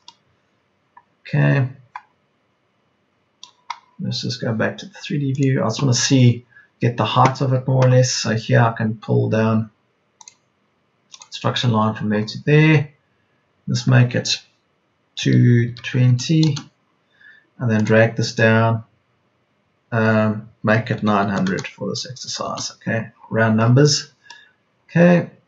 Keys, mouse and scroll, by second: 15.1 KP_2, 15.9 KP_0, 20.9 KP_9, 21.2 KP_0.